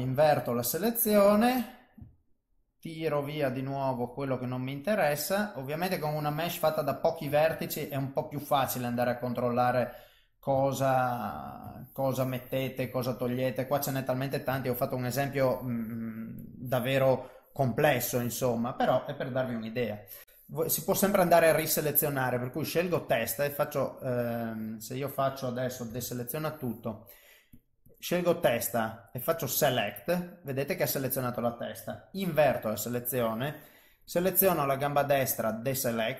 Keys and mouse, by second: 0.0 ctrl+i, 2.2 ctrl+shift+right click, 7.5 alt+middle click, 8.2 middle click, 9.0 alt+middle click, 9.7 middle click, 10.6 shift+middle click, 11.7 ctrl+shift+right click, 13.0 middle click, 14.6 shift+middle click, 16.5 click, 17.9 click, 18.7 middle click, 20.2 click, 20.2 a, 21.0 click, 21.6 click, 23.2 click, 25.9 alt+a, 27.6 click, 27.9 click, 29.3 click, 30.6 middle click, 32.3 ctrl+i, 34.1 click, 35.3 click.